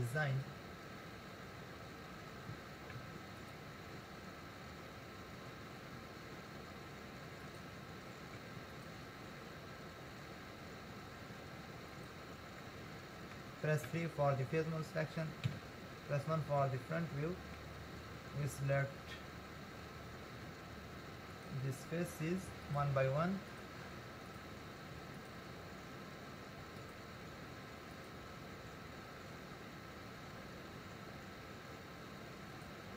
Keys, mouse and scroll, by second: 3.0 ctrl+r, 8.4 ctrl+r, 12.7-14.1 middle drag, 14.1 3, 15.5 KP_1, 16.8-18.6 shift+middle drag, 18.6-21.3 scroll up 2, 21.3 click, 22.7 shift+click, 23.5 shift+click, 24.3 shift+click, 25.1 shift+click, 26.8 shift+click, 27.9 shift+click, 32.5 shift+click.